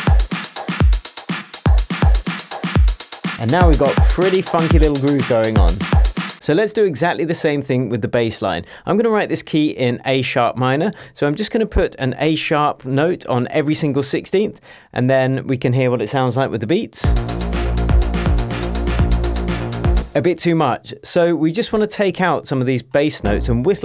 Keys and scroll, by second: 11.9 super+d, 17.0 space, 20.0 space, 22.1 p.